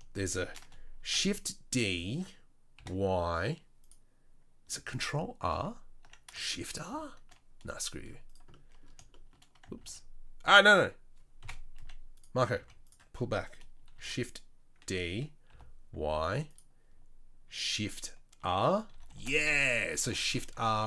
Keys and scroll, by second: 1.0 shift+d, 5.5 ctrl+r, 9.8 ctrl+z, 11.4 KP_7, 11.8 z, 12.5 z, 13.9 shift+d, 18.4 shift+r, 18.9 shift+r, 19.1 shift+r, 20.2-20.8 typing.